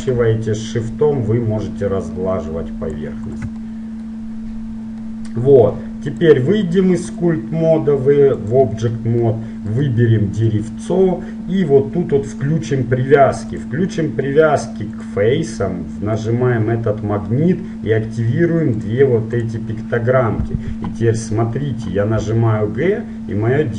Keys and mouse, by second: 3.6-5.2 drag, 3.9-5.2 middle drag, 6.8-7.8 drag, 6.8-7.8 middle drag, 8.7 click, 9.2 middle click, 9.8-13.7 right drag, 13.7-21.3 drag, 22.4 g.